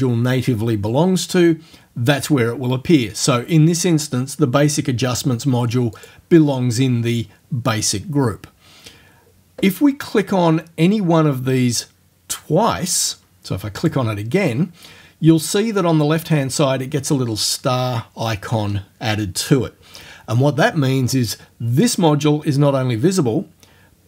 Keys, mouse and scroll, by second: 6.0 click, 13.8 click.